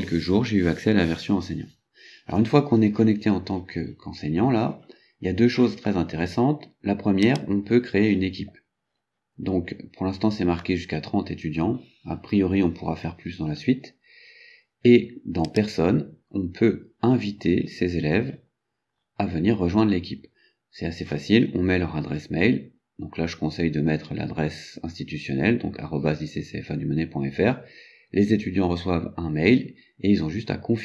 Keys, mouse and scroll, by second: 7.3 click, 15.5 click, 17.1 scroll down 2, 17.7-19.3 scroll down 6.